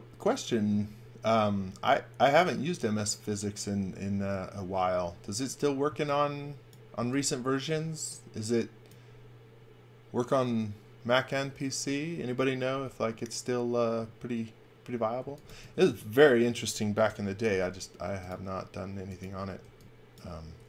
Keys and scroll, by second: 5.9 x, 7.1 v, 15.0-16.0 typing, 17.1 l, 19.6 e.